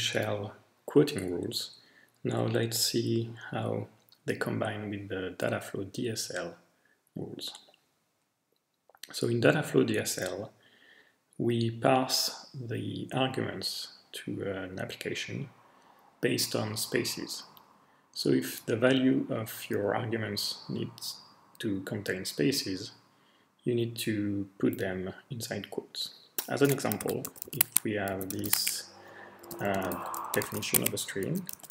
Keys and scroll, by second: 26.8-31.7 typing.